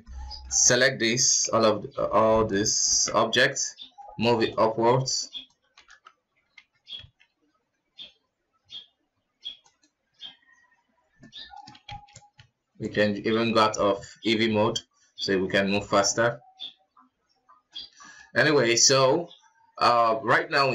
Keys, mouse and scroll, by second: 0.0 shift+z, 0.6 middle click, 1.2 q, 2.2 KP_1, 3.1 b, 7.5-10.7 drag, 11.4-12.1 middle drag, 12.1 shift+z, 13.5 scroll up 1, 13.7 KP_1, 13.9 KP_1, 14.4 scroll up 1, 17.3 g, 17.9-20.7 middle drag.